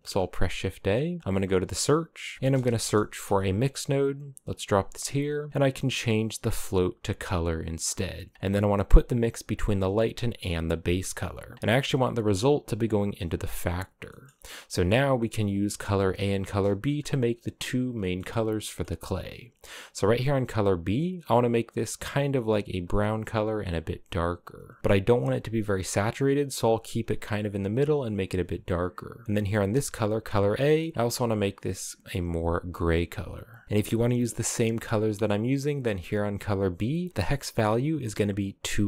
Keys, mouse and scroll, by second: 4.5-5.2 scroll up 3, 5.2-7.6 drag, 10.3 click, 12.0 click, 13.6 scroll down 2, 13.7 middle click, 13.9-14.6 scroll up 6, 16.0-16.5 scroll down 1, 16.6-18.9 scroll down 1, 18.9 scroll down 2, 19.0-19.6 scroll up 3, 19.9 click, 29.4 click, 30.3 scroll down 2, 30.5 middle click, 30.9 click, 33.6 ctrl+v, 34.2-35.3 middle drag, 35.3 click.